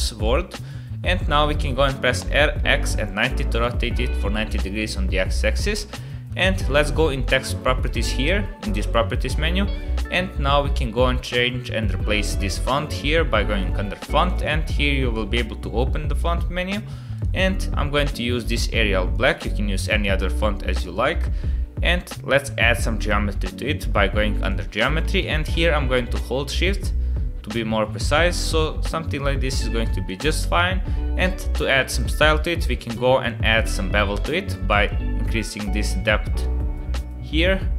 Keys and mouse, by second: 0.2 Tab, 2.1 r, 5.4-5.8 shift+drag, 5.8-6.3 middle drag, 10.7 middle click, 22.6 middle click, 24.4 click, 25.2-30.1 shift+drag, 31.3 shift+click, 31.6-32.0 middle drag, 33.3 middle click, 34.8-37.7 shift+drag.